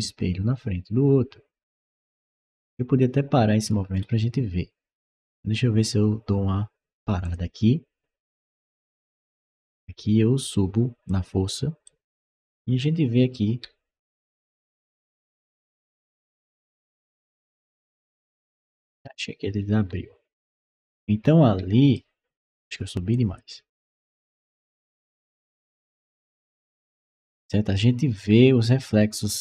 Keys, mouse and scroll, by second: 3.5-7.1 scroll up 2, 7.1 click, 8.9 click, 10.3 click, 11.7-21.8 right drag, 14.0-16.6 typing, 18.9-21.5 typing, 23.0 click, 23.7 click, 24.7 click, 25.8-29.4 right drag, 26.3 w, 27.1 d, 27.9 w.